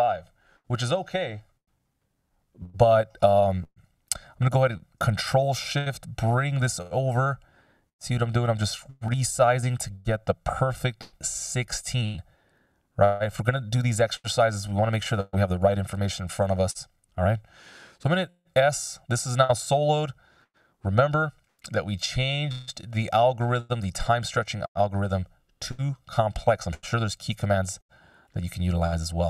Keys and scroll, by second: 15.8 F16, 17.9 s.